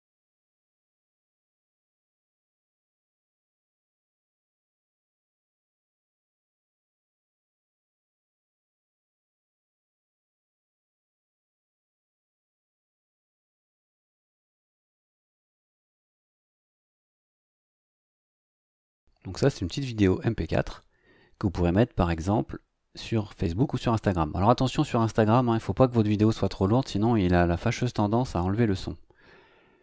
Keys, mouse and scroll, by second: 1.1-2.8 typing, 3.1 Return, 5.0 click, 7.6 click, 8.5 click, 10.1 click, 11.4 click, 13.8 click, 15.3 click, 16.8 click.